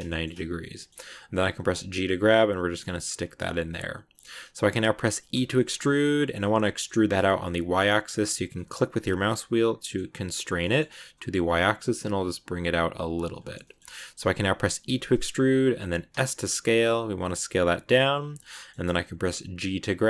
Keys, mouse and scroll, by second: 1.4 g, 3.3-5.2 middle drag, 5.2 e, 13.3-13.7 shift+scroll up 2, 13.5 middle click, 14.2 scroll up 2, 14.7 e, 18.2-19.7 middle drag, 19.4 g.